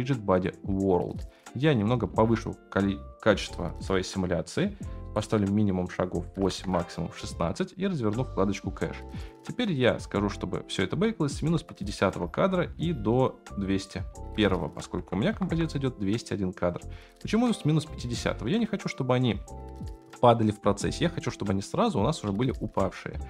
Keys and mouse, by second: 0.3 click, 2.3-5.0 drag, 5.4-6.6 drag, 7.5-12.2 drag, 14.2-15.5 drag, 17.9-18.3 shift+middle drag, 21.4 space, 22.2 space.